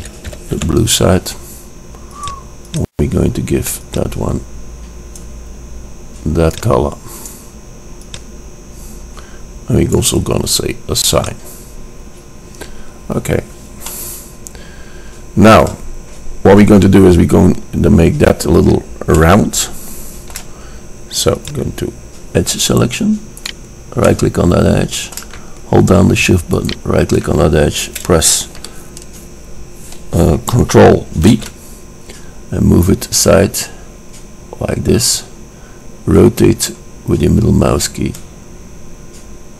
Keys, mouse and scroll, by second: 2.9-4.8 drag, 6.7-10.2 drag, 11.4-13.0 drag, 13.0-14.0 middle drag, 14.0-16.0 drag, 19.3-21.3 middle drag, 21.5-23.5 drag, 23.6-24.7 drag, 24.1-24.7 middle drag, 24.7 click, 24.9 middle click, 25.0 click, 25.3 middle click, 25.4 click, 25.5-26.0 middle drag, 26.9 click, 31.5 ctrl+b.